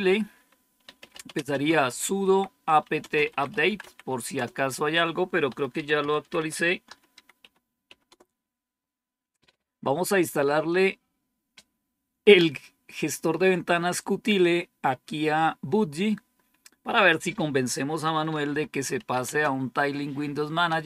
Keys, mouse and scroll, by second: 0.5-8.2 typing, 18.0-20.8 typing.